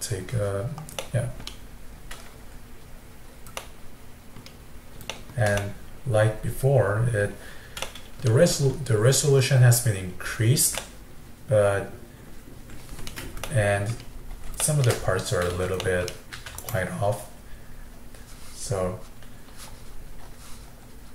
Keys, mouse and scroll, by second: 1.0-2.0 middle drag, 2.0-2.5 scroll up 2, 3.7-7.2 middle drag, 7.2 scroll down 1, 7.9-14.0 middle drag, 14.0-14.6 scroll up 3, 14.6-16.4 shift+middle drag, 16.4 f.